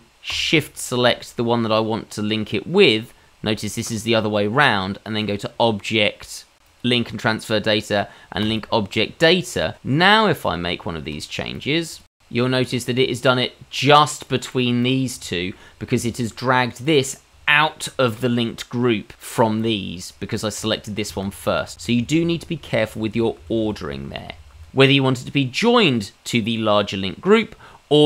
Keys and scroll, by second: 9.9 Tab, 11.4 i, 11.7 e, 12.0 Tab, 21.5-21.9 ctrl+z, 22.1 ctrl+z, 22.3 ctrl+z, 22.6 ctrl+z, 22.9 ctrl+z, 23.1 ctrl+z, 23.4 ctrl+z, 23.6 ctrl+z, 23.8 ctrl+z, 24.0 ctrl+z, 24.3 ctrl+z, 24.5 ctrl+z.